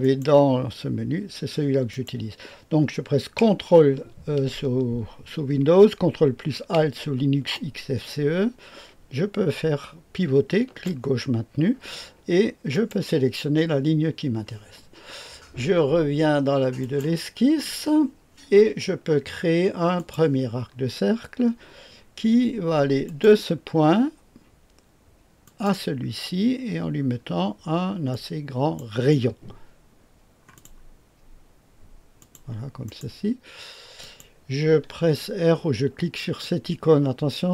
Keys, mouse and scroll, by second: 0.0 click, 0.3 click, 1.9 click, 7.5-10.9 ctrl+alt+drag, 12.7 click, 16.8 click, 19.9 click, 23.0 click, 25.4 click, 28.1 click, 30.5 click, 30.8 click, 32.1 click, 32.8 right click, 34.0 click, 36.4-37.5 drag.